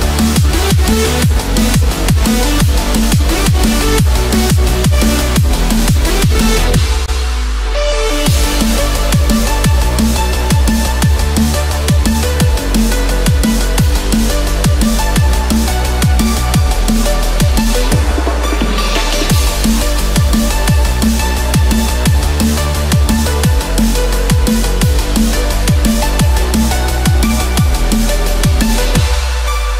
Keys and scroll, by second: 3.1 ctrl+z, 15.1 ctrl+-, 15.8 ctrl+=.